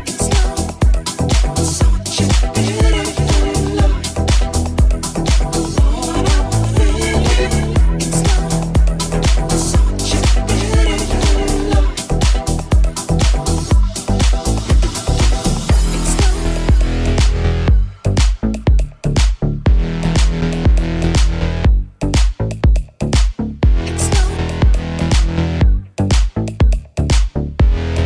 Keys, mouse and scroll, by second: 0.3-2.9 middle drag, 1.1 Tab, 5.2 KP_3, 6.6 g, 9.4-14.4 middle drag, 10.2 KP_1, 10.9 g, 14.4 g, 15.9 s, 17.4 g, 19.1-28.0 middle drag, 23.5 g, 27.9 g.